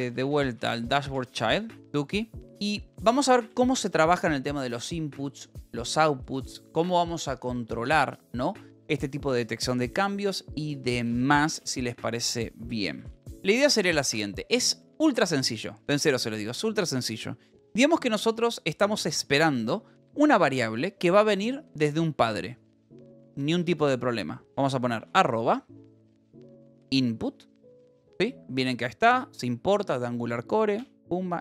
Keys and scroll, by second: 0.0-4.5 typing, 13.3 Return, 20.0 j, 21.2 a, 23.5 space, 25.5-27.4 typing, 30.8 Return.